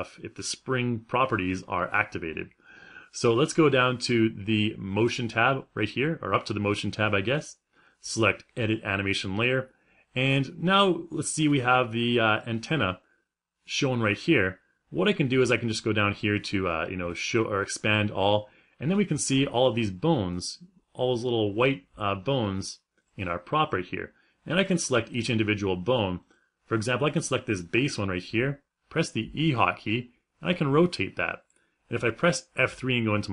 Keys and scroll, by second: 28.9 f, 32.7 F3.